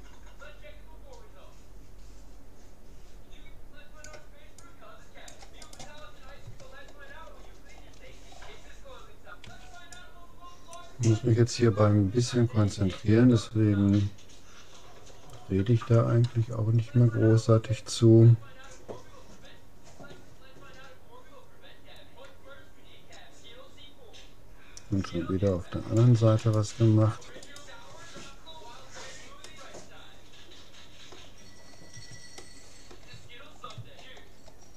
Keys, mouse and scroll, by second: 5.8-7.4 right drag, 6.0-8.2 middle drag, 8.2-8.6 scroll up 1, 8.6-10.4 middle drag, 9.6 c, 26.6-29.2 right drag, 28.4-31.2 middle drag, 32.4-34.7 middle drag, 34.4-34.7 scroll down 1.